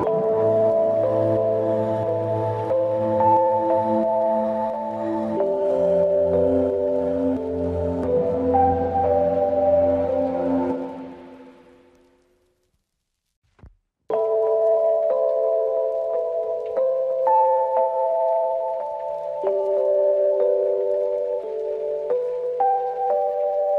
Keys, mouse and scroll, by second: 2.4-3.2 drag, 5.3 click, 7.7 scroll down 1, 9.4 drag, 11.2-11.9 middle drag, 13.1-14.8 drag, 18.3 drag, 20.7-22.3 drag, 22.4-22.8 scroll down 1, 22.8-23.5 scroll up 1.